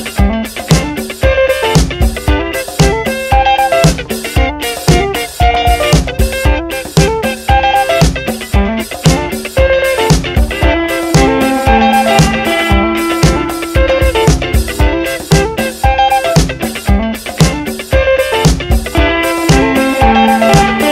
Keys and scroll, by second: 3.7 F9, 12.4-15.0 typing, 16.8-20.9 typing.